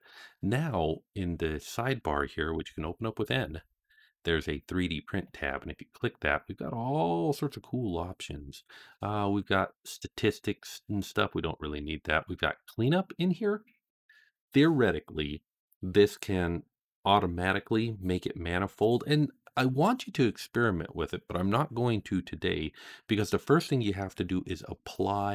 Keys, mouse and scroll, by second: 2.4 n, 3.0 n, 5.1 click, 7.1-8.1 scroll up 5, 11.0 click, 12.1 click, 12.5 click.